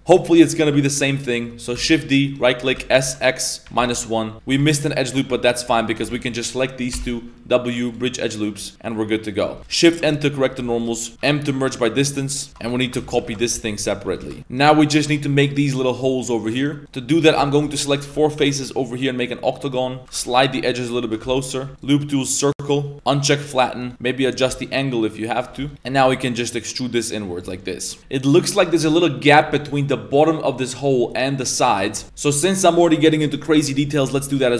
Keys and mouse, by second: 0.2 shift+middle click, 2.1 shift+d, 2.8 s, 4.5 2, 4.7 alt+right click, 4.9 middle click, 5.3 z, 5.9 alt+shift+right click, 6.1 z, 6.4 middle click, 6.9 w, 8.6 z, 8.7-9.4 middle drag, 8.7 a, 9.6 middle click, 10.2 shift+n, 10.5 Tab, 10.7 middle click, 11.0 shift+middle click, 11.1 Tab, 11.2 m, 12.3 middle click, 12.7 a, 13.0 shift+d, 13.2 s, 16.8 i, 16.9 middle click, 17.2 right click, 17.5 ctrl+shift+right click, 17.7 middle click, 18.7 i, 20.0 g, 20.2 g, 21.3 Tab, 21.3 middle click, 21.7 Tab, 21.7 3, 21.7 w, 23.0 click, 23.6 middle click, 25.6 Tab, 25.6 middle click, 25.7 Tab, 26.1 e, 27.7 middle click, 31.1 middle click, 33.6 middle click, 34.0 z, 34.1 shift+middle drag.